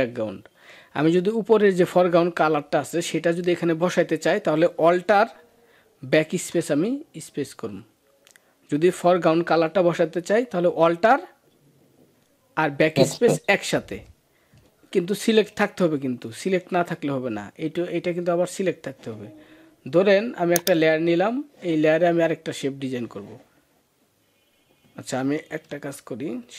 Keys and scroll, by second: 6.1 alt+BackSpace, 25.5 ctrl+z.